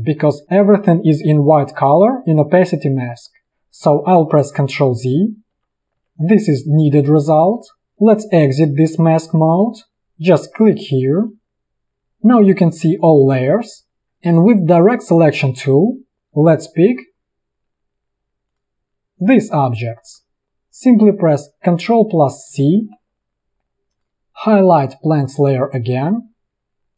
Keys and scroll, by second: 4.1 ctrl+z, 15.7 a, 22.6 ctrl+c.